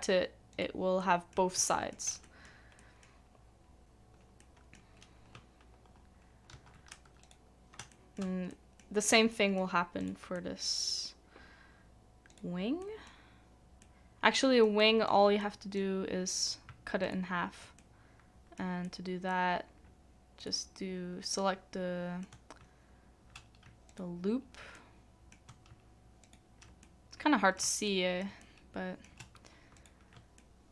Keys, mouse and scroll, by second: 1.0 middle click, 1.7 shift+middle click, 2.2 middle click, 3.1-4.4 scroll down 1, 4.4 middle click, 6.5 ctrl+e, 7.9 shift+middle click, 12.8 middle click, 17.0 alt+click, 17.8 alt+middle click, 20.4 alt+click, 21.3 alt+middle click, 23.9 alt+click, 24.7 middle click, 26.8 middle click, 27.8 shift+middle click, 28.4 middle click, 30.4 middle click.